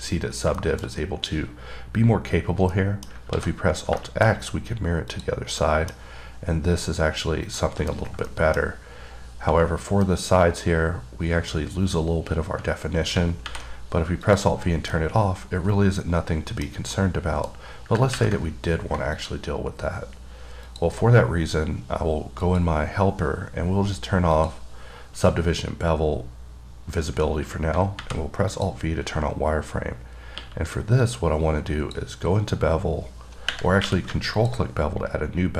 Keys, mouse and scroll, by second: 0.5 scroll down 3, 0.8 middle click, 1.4-1.9 scroll up 1, 2.7 scroll down 2, 3.0 middle click, 4.3 middle click, 5.5 click, 5.9 middle click, 7.8 middle click, 8.6 middle click, 9.1-9.8 scroll up 6, 10.9 scroll down 2, 14.9-15.2 scroll down 2, 15.2 middle click, 17.2 middle click, 17.9-18.3 scroll up 1, 19.4 click, 21.0 click, 22.7 click, 24.6 click, 28.8 click, 29.5 scroll up 2, 31.3 click, 34.6 click.